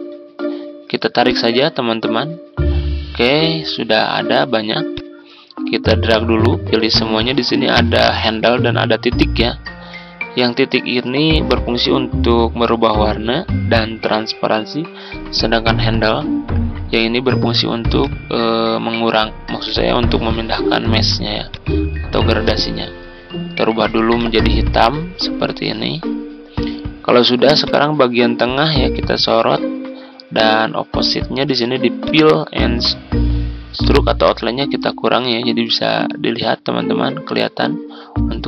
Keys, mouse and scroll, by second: 20.1 ctrl+z, 21.4-38.4 drag.